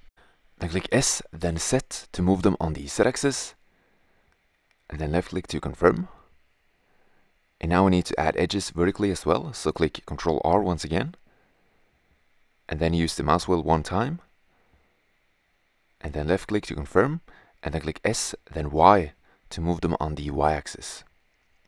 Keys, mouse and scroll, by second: 0.2 s, 7.3-8.8 middle drag, 11.8 ctrl+r, 19.0 s.